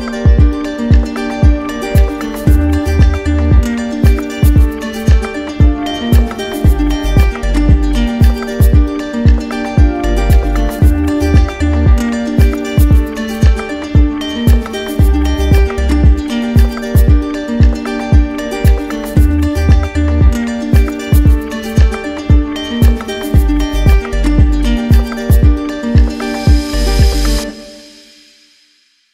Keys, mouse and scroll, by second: 0.1 middle click, 2.3 click, 3.5 click, 4.4 right click, 5.1 click, 7.1 click, 7.8 click, 8.7 click, 9.5 click, 11.3 click, 12.1 right click, 13.6 right click, 14.7 click, 16.4 click, 17.5 click, 17.9 click, 19.0 click, 19.4 click, 20.1 right click, 21.3 click, 22.1 click, 22.7 alt+right click, 24.3 click, 25.2 right click, 25.4 ctrl+z, 26.6 click, 27.0 click, 27.4 click, 27.8 click, 28.2 click, 28.4 click.